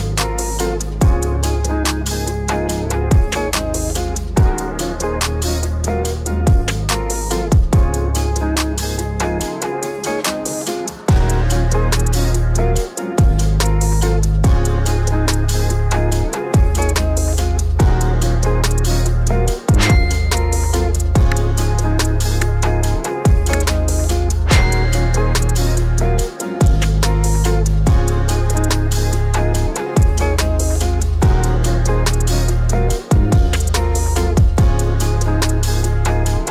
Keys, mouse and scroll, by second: 4.1 space, 26.3 click, 26.9 space, 32.1 space, 32.8 click, 34.1 scroll up 1, 35.6 click.